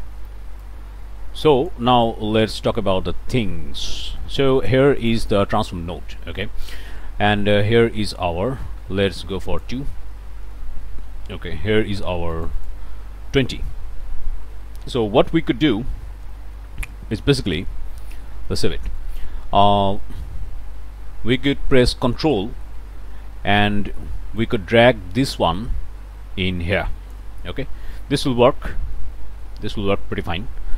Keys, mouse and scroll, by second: 0.0 click, 0.6-1.9 drag, 1.9 click, 2.2-3.2 scroll up 3, 3.3 click, 3.7 scroll up 1, 4.0 click, 5.0 click, 9.4 click, 10.1 2, 10.6 Return, 12.3 click, 18.2 ctrl+click, 18.5 ctrl+s, 18.9 ctrl+click, 20.0 click, 21.2 scroll up 2, 24.4-27.3 ctrl+drag, 28.6-30.7 drag.